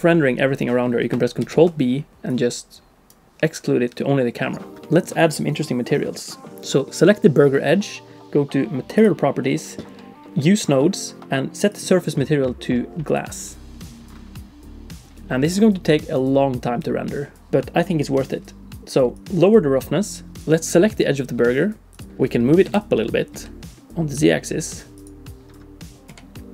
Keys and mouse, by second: 1.4 ctrl+b, 4.8 shift+click, 6.2 middle click, 6.5 d, 10.3 d, 11.2 ctrl+z, 11.7-13.2 drag, 19.1 click, 20.4 alt+a, 20.4 click, 21.9 click, 22.9 g, 26.1 r.